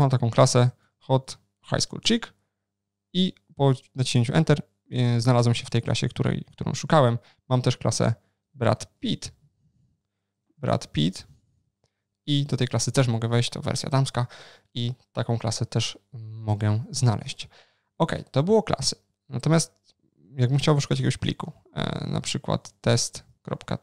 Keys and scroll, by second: 6.9 super+o, 20.0 ctrl+n.